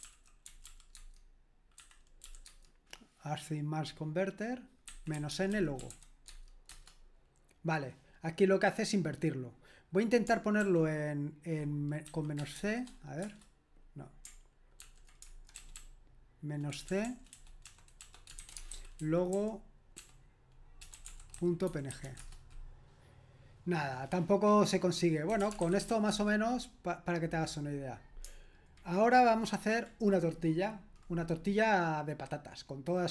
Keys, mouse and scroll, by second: 0.0-1.8 typing, 4.9-6.4 typing, 6.7 Return, 10.6 ctrl+p, 12.1-12.6 typing, 13.2 Return, 14.8 ctrl+p, 15.6-22.6 typing, 25.0-26.4 typing.